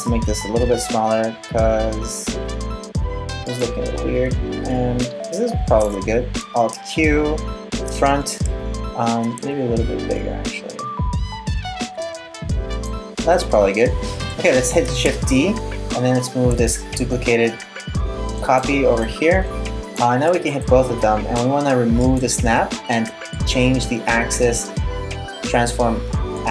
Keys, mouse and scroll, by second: 4.6 middle click, 6.4 alt+q, 9.0 s, 15.0 shift+d, 18.6 middle click, 20.1 shift+right click, 21.6 click, 22.9 click.